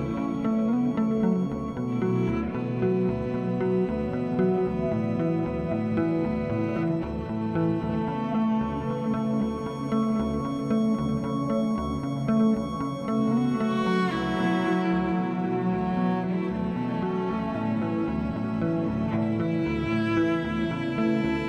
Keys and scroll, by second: 1.9 ctrl+-, 2.8 ctrl+-, 16.2 alt+BackSpace, 17.5 ctrl+z, 20.9 ctrl+z.